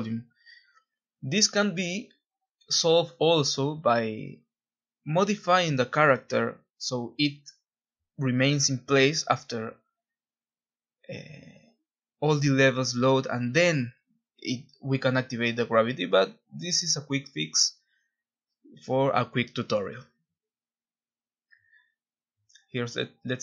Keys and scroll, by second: 9.7 Escape, 10.5 Escape, 10.7 r, 15.1-16.9 typing, 18.2 Escape, 18.3-19.2 typing.